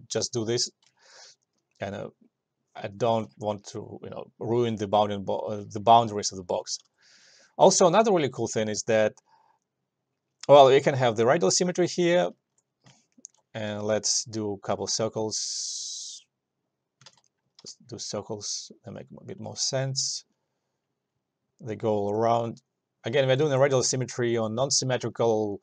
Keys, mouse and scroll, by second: 1.2-5.7 alt+drag, 7.0 s, 8.5 click, 10.8 click, 12.5 alt+middle click, 13.2 alt+right click, 15.0-17.7 drag, 17.7 ctrl+z, 17.7 e, 18.5-22.3 drag, 22.3-25.6 alt+drag.